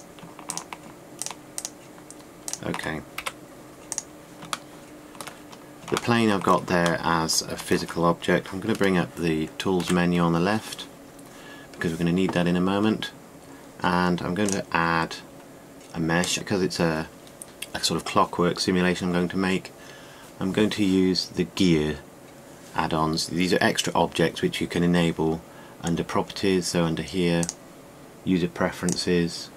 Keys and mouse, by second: 3.8 Delete, 8.2 middle click, 10.5 t, 12.8-17.9 drag, 28.2-29.5 middle drag.